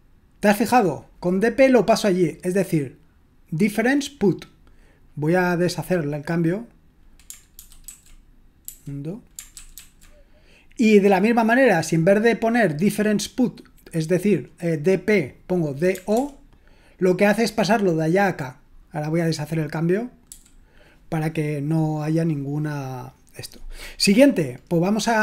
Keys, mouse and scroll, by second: 7.6 ctrl+w, 7.9 ctrl+w, 8.6 u, 9.5 ctrl+w, 9.8 ctrl+w, 15.6-16.6 typing, 20.2 u.